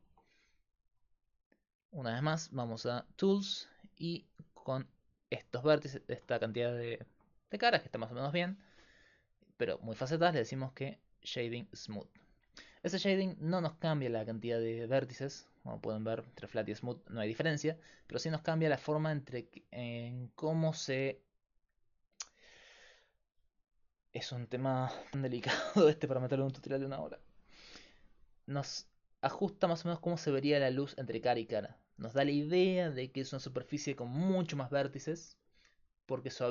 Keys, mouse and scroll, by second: 0.1 Tab, 3.0-5.6 drag, 5.6-10.9 middle drag, 10.9-12.5 drag, 13.3-20.4 drag, 35.5-36.5 middle drag.